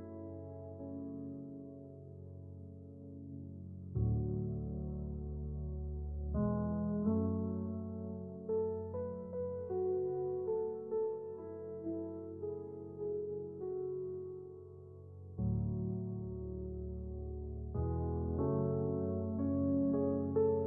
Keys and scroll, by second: 0.0-0.9 typing, 5.9 Return, 7.4 j, 10.3-11.3 typing.